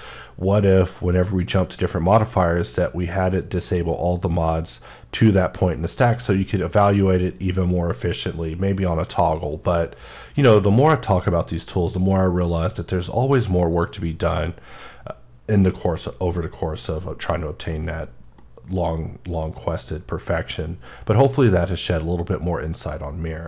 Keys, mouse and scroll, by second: 12.5 right click, 13.1-14.6 middle drag, 16.8 scroll up 2, 18.4 scroll, 18.4 middle click, 18.7-19.0 scroll down 1.